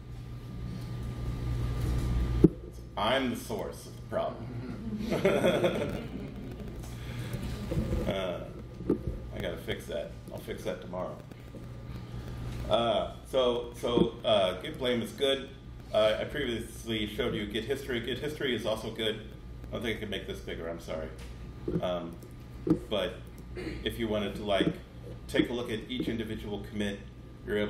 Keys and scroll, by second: 5.2 f, 7.1 super+z, 16.1 super+9.